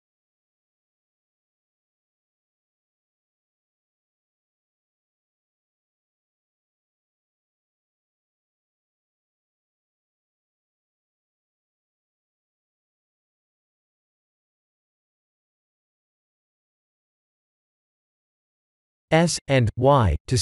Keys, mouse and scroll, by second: 0.1 b, 0.8 click, 1.4 b, 1.9 g, 3.2 click, 3.8 click, 4.6 b, 5.0 g, 6.4 click, 6.7 click, 7.2 b, 7.7 g, 9.6 click, 10.1 b, 10.7 g, 12.2 click, 12.7 b, 13.1 g, 16.2 click, 17.4 middle click, 18.3 middle click, 19.0 Tab, 19.6 s.